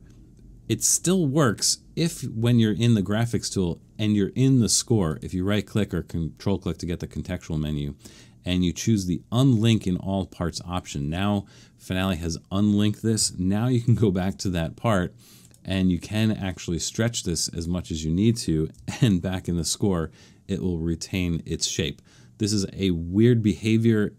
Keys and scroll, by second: 13.9 alt+super+/, 19.1 alt+super+/.